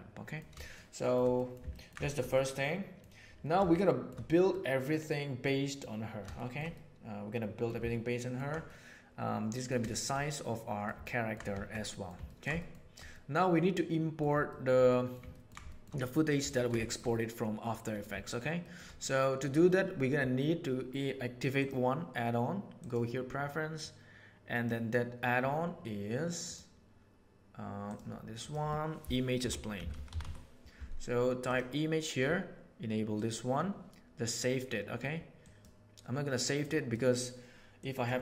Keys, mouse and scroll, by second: 0.7-1.1 shift+middle drag, 1.3 middle click, 1.7 ctrl+middle click, 2.0 shift+middle click, 2.3-3.0 middle drag, 3.7-4.1 shift+middle drag, 4.4-5.8 middle drag, 6.2-7.6 shift+middle drag, 7.8-8.4 ctrl+middle drag, 8.6-9.6 middle drag, 9.8 shift+middle click, 10.1-10.8 middle drag, 11.0-11.4 ctrl+middle drag, 11.8 middle drag, 12.2 ctrl+middle click, 13.2-14.2 middle drag, 14.4 shift+middle drag, 14.8-15.4 middle drag, 15.6 shift+middle click, 16.0 middle click, 16.4 ctrl+middle click, 18.1 shift+middle click, 18.5 shift+middle click, 18.9 middle click, 21.5-23.0 drag.